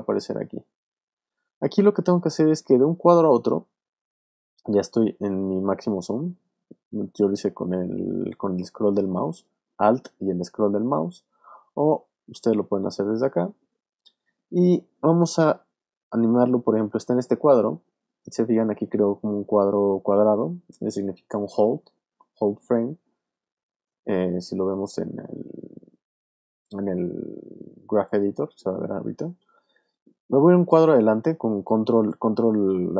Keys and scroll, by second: 29.4 super+Right.